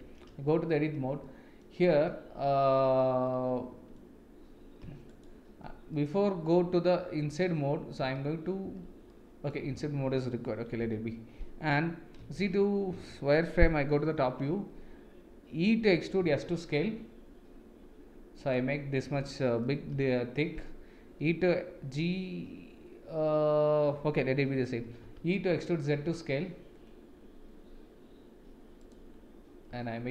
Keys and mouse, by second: 1.2-1.6 middle drag, 3.3 middle click, 5.1 alt+click, 6.0-7.3 middle drag, 9.1 middle click, 10.8 KP_1, 12.4 shift+z, 14.1 KP_7, 15.9 e, 19.9 KP_1, 24.8 e, 29.7 s.